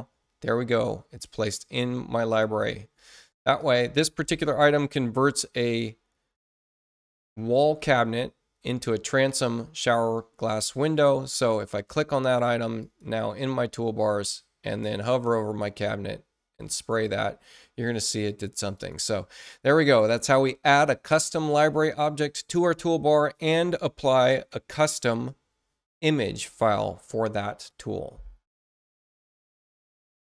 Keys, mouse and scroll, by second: 2.3 click, 9.0 click, 12.7 click, 16.5 click, 18.7 click, 30.1 shift+F1.